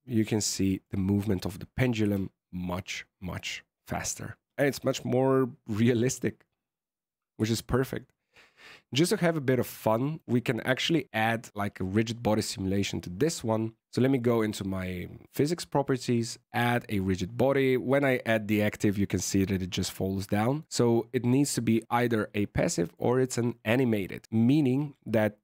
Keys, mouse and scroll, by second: 0.1 middle click, 1.9 KP_1, 4.5 middle click, 7.4 shift+middle click, 8.8 right click, 13.8 click, 14.1 click, 16.4 click, 20.6 click, 22.6 click.